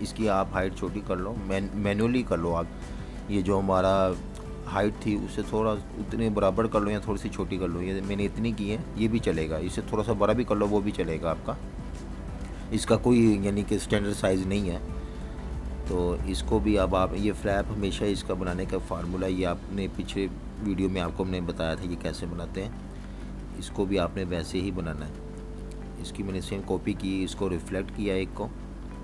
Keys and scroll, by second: 1.2 4, 1.4 Return, 3.4 typing, 6.1-9.0 typing, 10.7 z, 21.4 v.